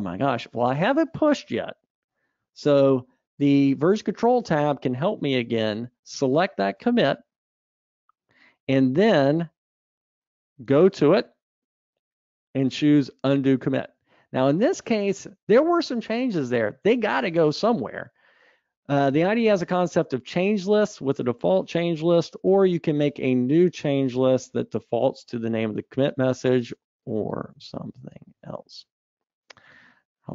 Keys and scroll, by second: 3.2 super+9.